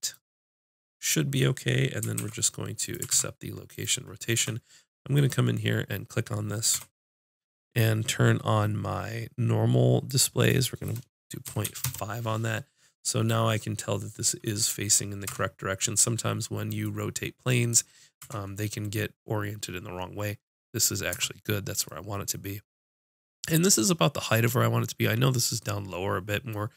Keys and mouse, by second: 2.2 ctrl+a, 3.1 ctrl+a, 4.4 Tab, 6.7 n, 10.1-15.0 drag, 15.3 Tab, 18.2 Tab, 21.1 Tab.